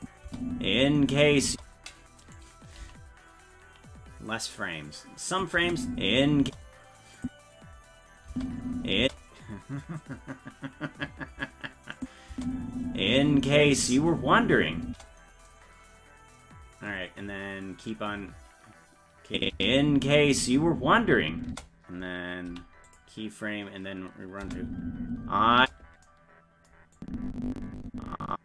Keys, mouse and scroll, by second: 0.0 click, 0.2 space, 2.2 right click, 2.8 g, 5.3 click, 5.6 space, 6.4 space, 7.2 click, 8.3 space, 12.0 click, 12.3 space, 19.3 click, 19.5 space, 22.5 i, 24.4 space, 27.0-28.4 drag.